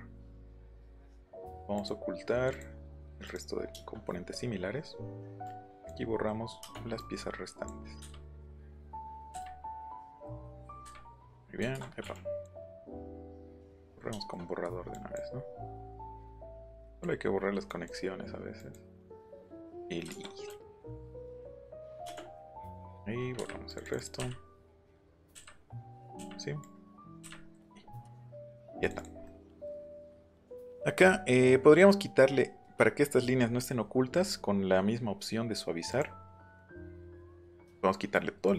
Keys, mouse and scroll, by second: 1.7 click, 2.5 click, 3.2 middle click, 3.7 middle click, 4.0 scroll down 1, 4.3 scroll up 1, 5.3 e, 5.4 click, 6.1-6.5 scroll down 4, 7.0 click, 8.0 Delete, 8.7 click, 9.3 Delete, 9.8 click, 10.8 Delete, 11.7 ctrl+z, 12.1 click, 12.7 click, 13.2 click, 13.6 click, 14.6 middle click, 14.9 right click, 15.8 right click, 16.8 click, 17.7 click, 18.6 click, 19.2 click, 20.1 ctrl+z, 20.6 click, 21.3 ctrl+z, 21.5 click, 22.4 click, 23.4 Delete, 23.7 click, 24.2 Delete, 24.9 click, 25.1 click, 25.3 Delete, 25.8 click, 26.6 click, 27.2 Delete, 27.4 middle click, 27.8 middle click, 28.4 shift+middle click, 28.8 click, 29.0 click, 29.3 middle click, 30.2 click, 30.5 click, 35.9 click, 36.9 click, 38.4-38.5 drag.